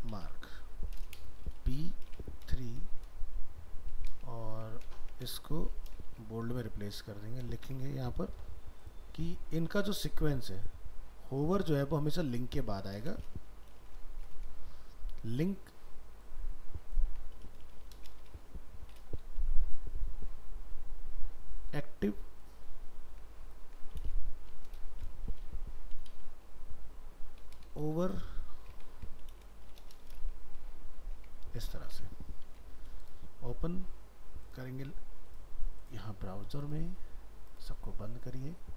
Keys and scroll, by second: 4.3 ctrl+shift+Right, 5.0 ctrl+x, 12.7 ctrl+x, 23.7 ctrl+x, 28.9 ctrl+x, 31.9 alt+Tab.